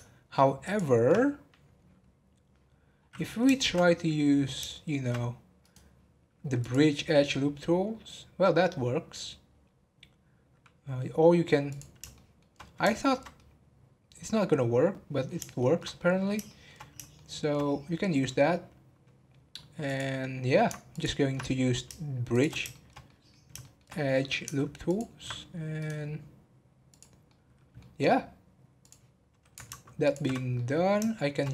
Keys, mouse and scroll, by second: 0.2-0.6 scroll up 1, 0.6 ctrl+click, 2.9 scroll down 1, 3.4 shift+middle click, 3.9 scroll down 1, 4.7 shift+middle click, 5.2-5.5 scroll down 1, 5.6-7.3 right drag, 7.3-10.3 middle drag, 11.7 click, 12.1-19.8 shift+middle drag, 19.8 click, 20.9 ctrl+click, 22.3 shift+click, 22.7-24.0 shift+middle drag, 24.0 scroll up 2, 24.8 ctrl+click, 25.3 scroll down 4, 25.8-27.2 right drag, 27.2-28.8 middle drag, 28.8-30.1 drag, 30.5-31.5 middle drag.